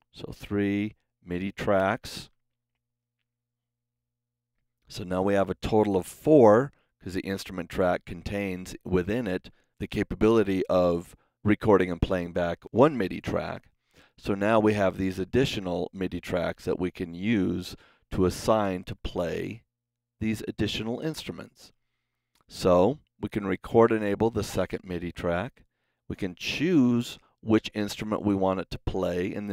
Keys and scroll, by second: 1.7 Home.